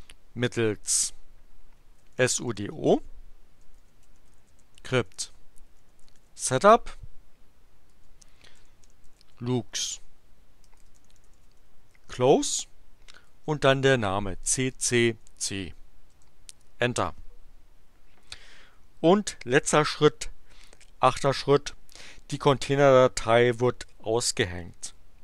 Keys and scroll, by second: 1.7-6.7 typing, 7.9-12.1 typing, 13.3 space, 14.4 c, 16.1 Return.